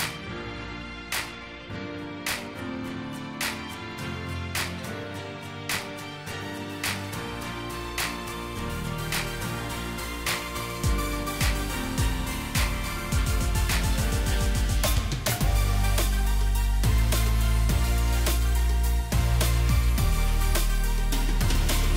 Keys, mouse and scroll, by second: 1.1 alt+shift+click, 11.9 alt+scroll down 1.